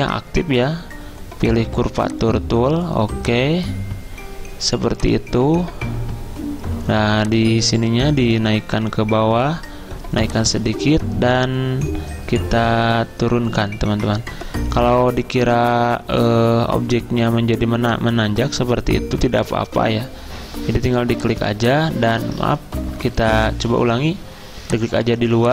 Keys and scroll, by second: 22.5 ctrl+z, 23.5 ctrl+z.